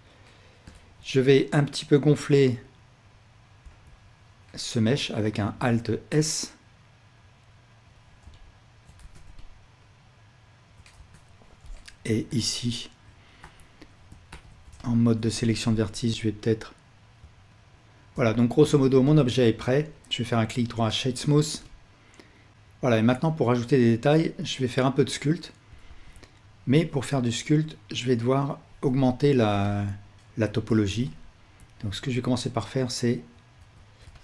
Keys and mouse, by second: 0.7 alt+a, 3.6 l, 5.6 alt+s, 8.4-11.6 alt+drag, 9.0 Tab, 11.6 KP_1, 12.5 alt+z, 13.4 1, 14.3 alt+a, 15.1-21.8 ctrl+alt+drag, 16.1 alt+z, 16.1 Tab, 25.9 ctrl+s, 28.8 Tab, 30.8 alt+shift+click, 33.6 Tab.